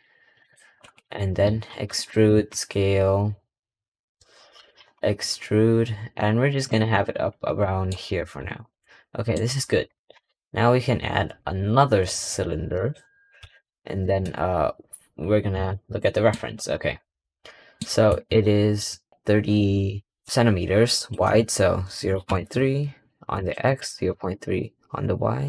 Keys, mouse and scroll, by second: 7.1 scroll, 7.5 middle click, 7.8 scroll down 2, 8.0 Tab, 8.4 scroll down 1, 8.6-10.0 middle drag, 10.0 shift+a, 13.3 g, 15.2-15.6 scroll up 3, 15.6-17.7 shift+middle drag, 17.7 scroll up 1, 18.5 shift+middle click, 18.8 shift+scroll up 1, 19.1-20.5 shift+middle drag, 20.8-23.4 drag, 23.5-25.4 drag.